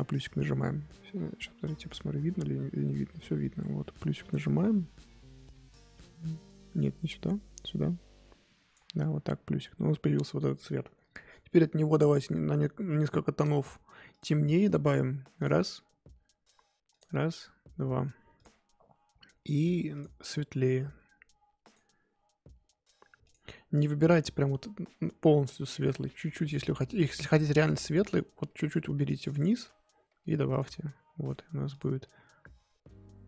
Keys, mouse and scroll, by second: 14.2-20.0 drag, 21.6-31.7 drag.